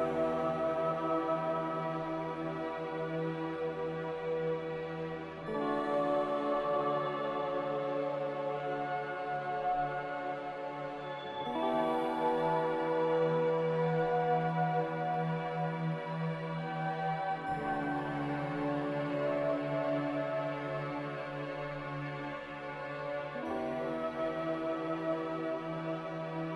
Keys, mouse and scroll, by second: 0.0 click, 0.8 a, 4.1 b, 5.3 a, 23.4 b, 25.5 a.